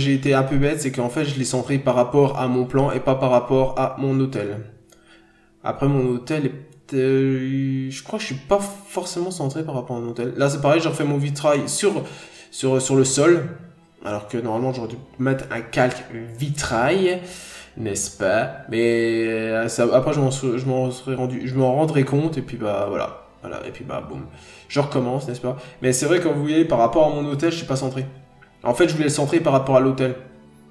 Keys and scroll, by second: 1.9 ctrl+z, 5.4 ctrl+z, 9.0 ctrl+z, 12.5 ctrl+z, 16.2 scroll up 1, 16.4 ctrl+z, 16.9-17.3 scroll down 1, 18.0 n, 18.1-18.7 scroll up 1, 19.9 ctrl+z, 21.3 ctrl+z, 23.8-24.4 scroll down 1, 28.8 ctrl+z.